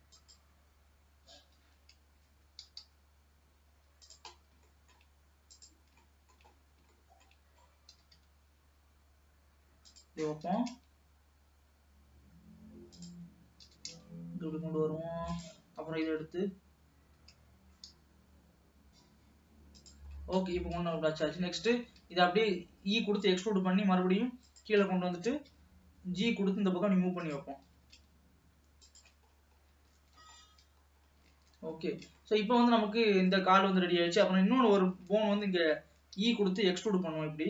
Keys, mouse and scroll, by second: 1.3 g, 4.4-4.9 scroll up 3, 4.9 shift+middle click, 5.7 click, 6.2 shift+middle click, 6.6-7.0 scroll up 4, 7.0 shift+middle click, 7.6 scroll up 1, 7.9 g, 10.5 g, 13.7 g, 15.9 g, 20.2-21.1 scroll down 9, 21.1 shift+middle click, 21.9 e, 25.2 g, 27.8 g, 29.4-29.7 scroll down 3, 30.2 ctrl+s, 30.5-31.2 scroll up 5, 31.2-31.6 scroll down 1, 31.7 ctrl+s, 31.9-32.3 scroll up 3, 32.3-34.1 shift+middle drag, 34.1-35.0 scroll up 3, 35.0-35.5 scroll down 2, 35.5-36.2 scroll up 3, 36.2 e.